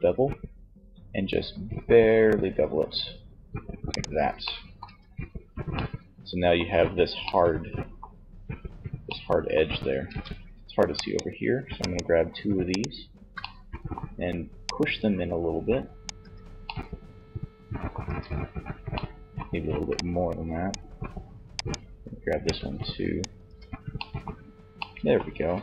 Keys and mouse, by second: 3.1-4.9 drag, 3.8 Tab, 9.1 Tab, 12.3-13.7 middle drag, 13.7-15.3 drag, 15.3 Tab, 17.1 Tab, 18.9-20.7 drag, 20.7-22.4 middle drag, 22.5 Tab, 23.0 click, 23.3-24.4 middle drag.